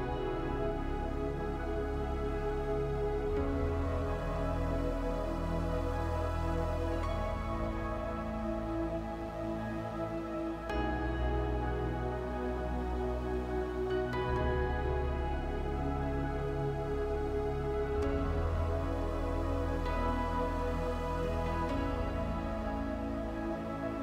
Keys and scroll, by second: 17.5 space.